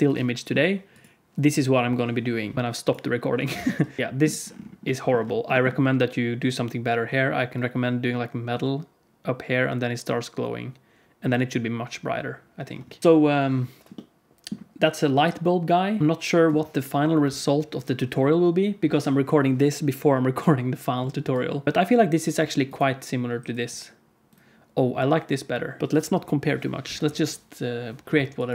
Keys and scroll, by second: 25.8 n.